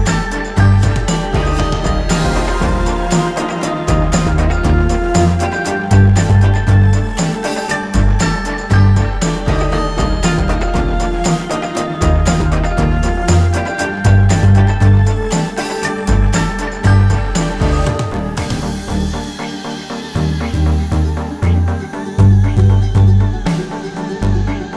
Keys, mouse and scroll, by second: 0.1 alt+scroll down 1, 0.6 ctrl+scroll up 1, 2.0-6.6 drag, 6.6 alt+scroll up 1, 7.0 ctrl+scroll down 1, 7.5 click, 10.5 right click, 13.3 click, 13.9 alt+scroll up 1, 16.6 click, 17.0 alt+scroll up 1, 17.6 click, 19.1 super+click, 20.3 space, 20.9 alt+scroll down 1, 21.1 alt+scroll up 1, 21.7 alt+scroll down 1, 22.3 alt+scroll up 1, 22.9 ctrl+space, 23.0 ctrl+click, 23.4 alt+scroll down 1, 23.7 alt+scroll up 1, 24.5-24.7 scroll down 1.